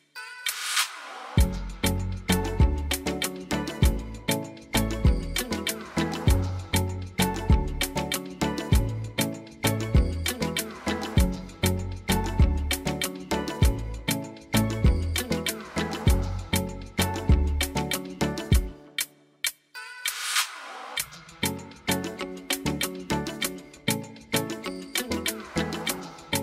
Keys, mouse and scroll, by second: 1.3 click, 7.3 click, 9.1 click, 10.0 click, 11.7 click, 12.8 click, 13.7 click, 14.6 click, 20.4 click, 21.5-22.6 drag, 24.7 click.